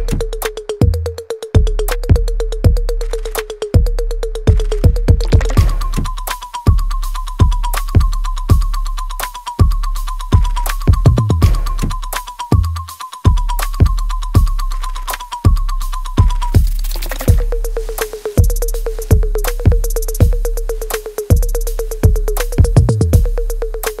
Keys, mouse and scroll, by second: 2.0 click, 3.0 Tab, 5.5 alt+right click, 5.9-9.4 alt+drag, 9.4 alt+middle click, 10.4-12.0 alt+drag, 12.0 alt+middle click, 12.5 alt+right click, 13.4 alt+click, 14.0 alt+middle click, 14.6 alt+right click, 15.9 click, 17.2 click, 17.5-20.0 ctrl+drag, 20.0 alt+click, 20.7 alt+middle click, 21.1 alt+right click, 21.6-24.0 alt+drag.